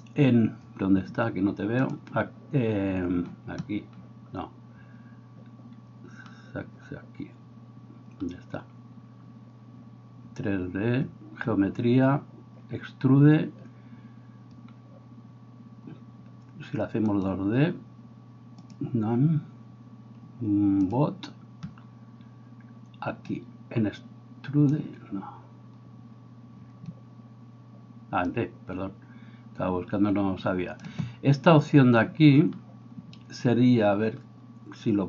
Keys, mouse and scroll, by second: 18.7-35.0 drag.